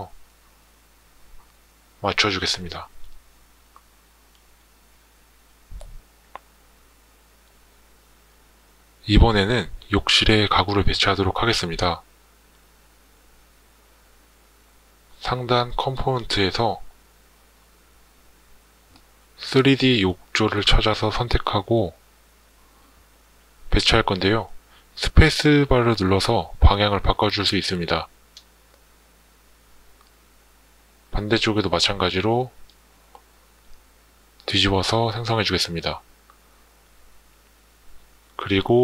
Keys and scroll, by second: 26.3 space, 32.8 space.